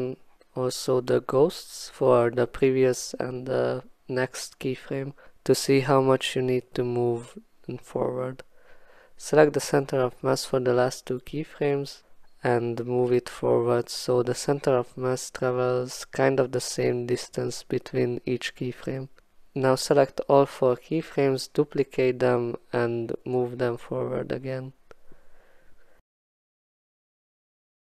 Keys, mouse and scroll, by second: 0.0 click, 0.5 click, 1.6-2.0 alt+scroll, 2.6-3.0 alt+scroll, 4.0-4.9 alt+scroll, 5.0 click, 5.7 alt+scroll, 8.7 click, 11.1 click, 11.9 click, 13.9 click, 15.3 alt+click, 19.3 click, 20.1 click, 21.0 shift+middle click, 22.9 click, 23.3 click, 23.9 click, 25.3 click, 25.5 click, 25.7 click, 25.9 click, 26.2 f.